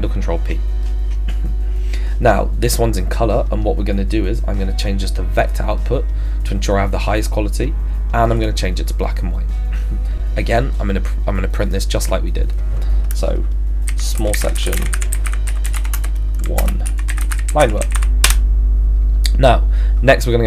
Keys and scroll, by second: 13.6-18.4 typing.